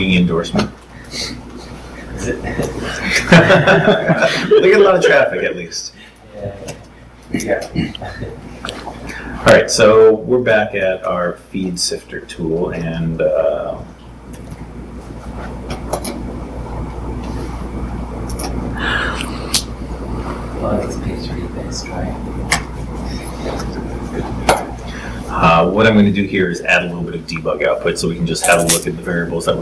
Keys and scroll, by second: 22.0 super+v.